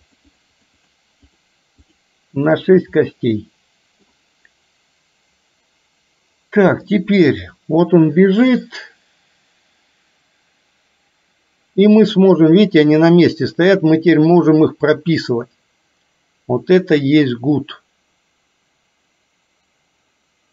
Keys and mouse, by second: 0.8 click, 3.2-4.2 middle drag, 6.9-20.5 drag.